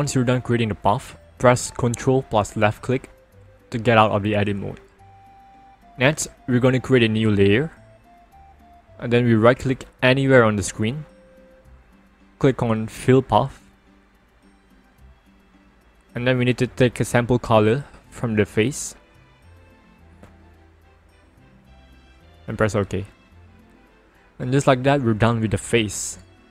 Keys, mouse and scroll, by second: 3.3 ctrl+click, 7.4 click, 8.4 click, 11.3 right click, 15.0 click, 20.3 click, 22.6 click.